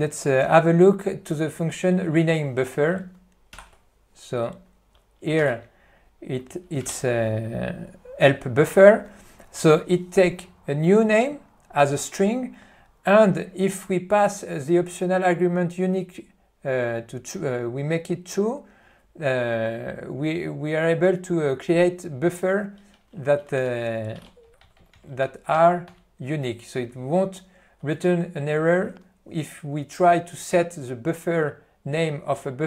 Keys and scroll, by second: 3.9 ctrl+d, 5.8 n, 7.2 ctrl+p, 23.8 ctrl+g, 24.5 n, 25.9 ctrl+p.